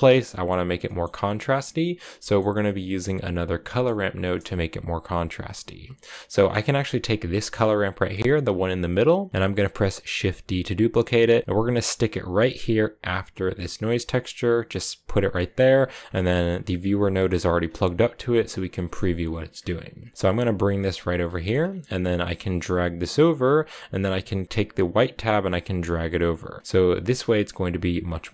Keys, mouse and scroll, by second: 0.0-7.2 middle drag, 7.2 click, 10.0 shift+d, 15.0 click, 15.5-17.0 scroll down 8, 17.0-17.7 scroll up 8, 18.5 middle click, 18.9-19.5 scroll up 4, 19.1 middle click, 20.0-21.1 drag, 21.1 middle click, 21.4 scroll up 3, 22.2-27.9 drag.